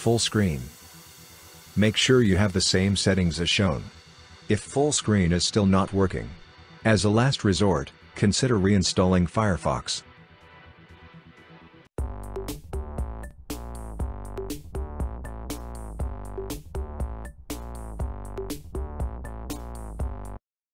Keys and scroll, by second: 8.0 typing.